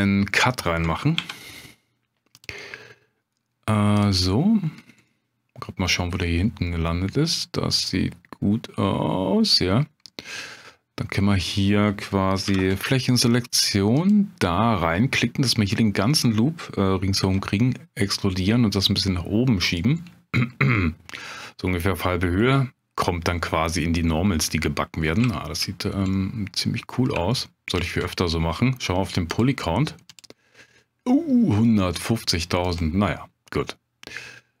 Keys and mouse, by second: 1.2 ctrl+r, 3.9 click, 5.1 middle click, 6.6-9.9 middle drag, 10.4 middle click, 12.5 3, 14.0 alt+click, 17.2 e, 19.7 click, 20.7 middle click, 22.5 middle click, 23.5 Tab, 24.5 middle drag, 25.3 shift+middle drag, 26.1-26.5 middle drag, 27.3-27.7 shift+middle drag, 29.4-32.8 drag, 33.6-34.6 middle drag.